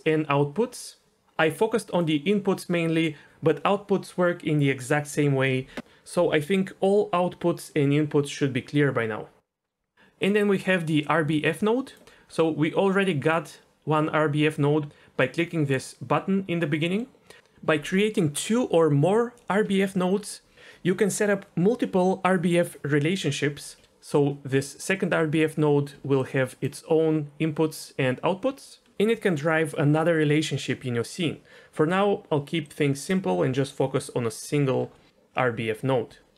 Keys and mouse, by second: 17.0 middle click, 25.9-27.8 d, 26.2-26.7 drag, 27.8-28.6 drag, 28.7 d, 28.8 d, 32.6-33.1 drag, 33.4 Delete, 33.9 middle click, 36.1 d.